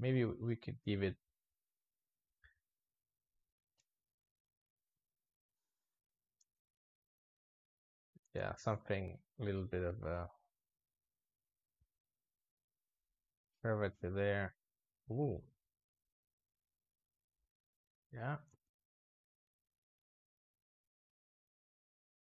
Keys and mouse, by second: 3.6 i, 4.2 click, 5.0-6.3 drag, 6.3 space, 8.0 space, 8.2-10.4 drag, 10.4-11.3 middle drag, 11.3 click, 12.2 v, 13.9 click, 14.6 click, 15.6 click, 16.6 click, 17.8 drag, 18.3 space.